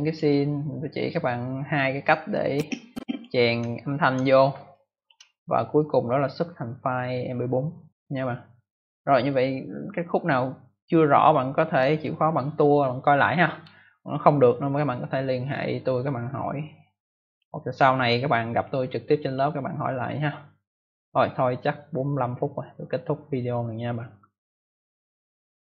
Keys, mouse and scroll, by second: 0.0 space, 0.1 space, 0.1 space, 1.0 click, 2.4 click, 3.7 scroll down 1, 4.4 space, 4.6 click, 4.9 space, 5.0 space, 9.3 click, 17.0 click, 19.0 click, 25.6 click.